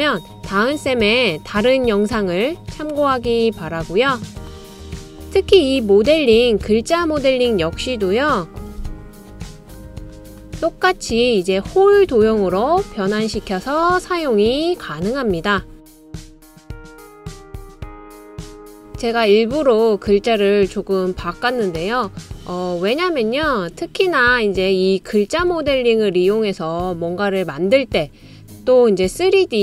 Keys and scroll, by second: 5.8-6.6 typing, 8.6 super+c, 8.9 super+v, 16.1-18.3 typing, 21.0-22.2 typing, 23.4-24.2 typing.